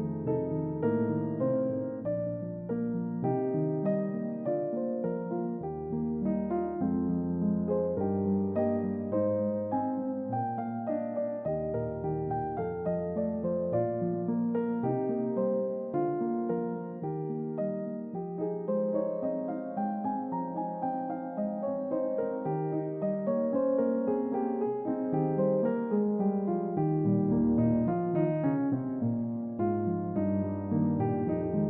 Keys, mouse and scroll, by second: 7.0-7.3 middle drag, 7.0-7.3 scroll up 2, 7.6 middle drag, 7.6 scroll up 2, 8.8-12.0 drag, 13.0-13.8 shift+drag, 15.2-16.8 shift+drag, 18.0 shift+click, 19.9 shift+click, 20.9 click, 22.5 click, 24.0 Tab, 25.6 middle drag, 26.2 scroll down 2, 26.7-27.1 middle drag, 27.3-27.8 scroll down 2, 27.7-29.1 middle drag, 30.6 click.